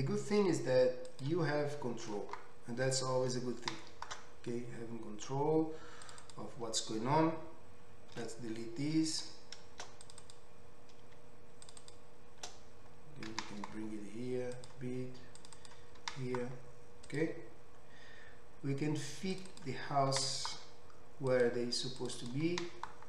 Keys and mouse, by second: 1.2-6.7 middle drag, 6.2 click, 8.2 ctrl+x, 10.1 click, 10.2 click, 11.7 shift+click, 13.3 g, 13.5-15.6 middle drag, 15.6 click, 15.7-19.4 middle drag, 16.1 g, 19.4 click, 19.4 middle click, 19.5 click, 19.6-22.2 middle drag, 20.1 g, 22.2 click, 22.3-23.0 middle drag, 22.5 g.